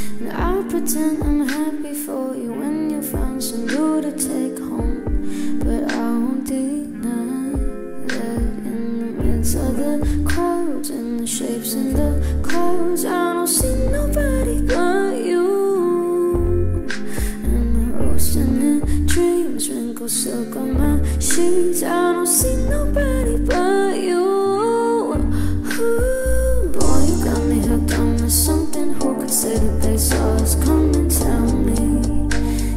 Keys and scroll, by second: 6.8 ctrl+k, 9.8 Return, 18.0 c.